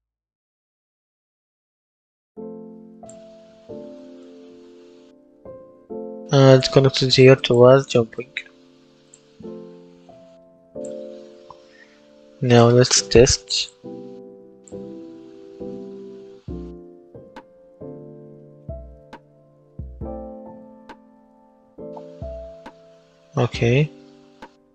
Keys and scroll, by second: 9.9 Delete, 15.0 space, 17.6 space, 22.3 w.